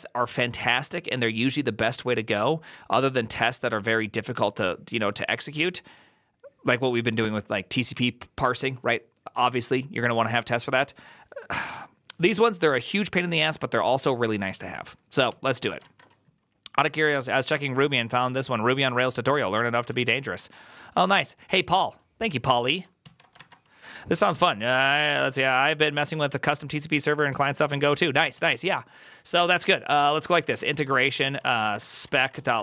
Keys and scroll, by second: 15.2 alt+{, 19.2 alt+r, 19.4 Right, 19.6 Right, 19.8 Right, 20.2 Escape, 23.0 alt+{, 30.0-32.6 typing.